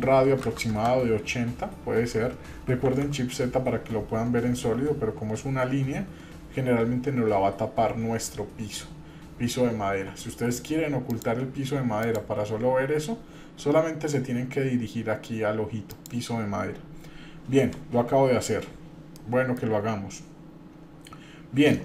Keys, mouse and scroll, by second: 2.8 shift+z, 11.1 click, 12.0 click, 15.9 click, 19.1 shift+middle click, 20.0 scroll up 1.